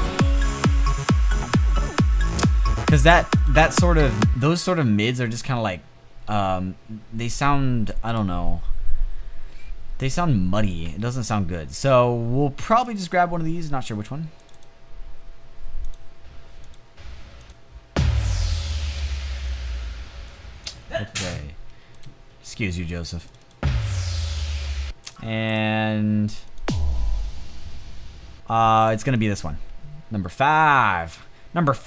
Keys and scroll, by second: 3.8 space, 20.5 space, 24.4 space, 27.9 space.